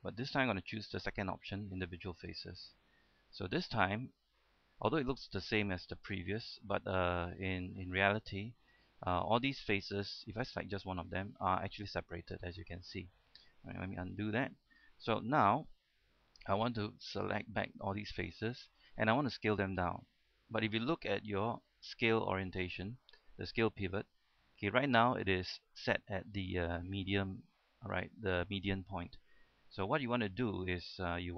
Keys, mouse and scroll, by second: 0.1 e, 2.2 click, 4.8 scroll down 1, 5.0 middle click, 5.9 scroll down 1, 6.3-7.4 middle drag, 7.4-8.4 scroll up 1, 9.1-10.4 middle drag, 11.3 click, 12.8 middle click, 14.7 ctrl+z, 14.7-15.0 scroll up 1, 15.0 middle click, 15.4 shift+middle click, 15.8-16.6 scroll up 1, 17.0 shift+right click, 18.3-19.3 scroll down 1, 19.7-20.0 scroll up 1.